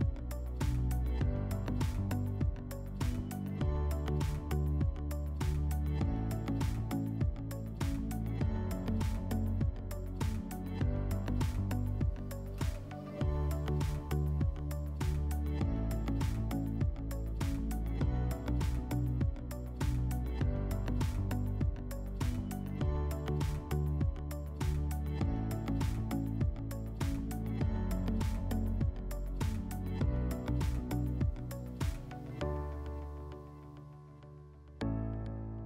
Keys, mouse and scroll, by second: 0.3 click, 1.4 click, 1.9 click, 2.7 click, 2.8 click, 3.3-4.2 typing, 5.2 click, 6.1 click, 7.2 right click, 8.3 click, 10.3 click, 12.0 click, 13.4-13.7 alt+scroll, 14.5 click, 14.5 alt+scroll, 14.6 click, 15.7 alt+scroll, 16.8-17.6 alt+scroll, 17.4 click, 18.6 click, 20.5 click, 21.0 click, 21.6 click, 22.6 click, 24.4 click, 25.6 click, 26.6 m, 28.9 click, 30.2 click, 30.7 click, 32.6 alt+middle click, 33.1 click, 34.1 alt+middle click.